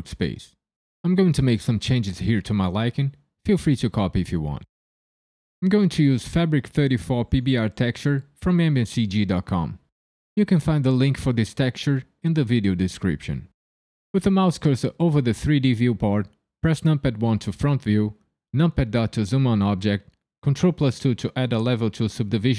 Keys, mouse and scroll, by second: 1.0 right click, 1.5 right click, 2.5 right click, 6.1 click, 7.8 click, 10.0 click, 12.2 middle click, 13.7 click, 16.6 KP_1, 18.5 KP_Decimal, 20.4 ctrl+2.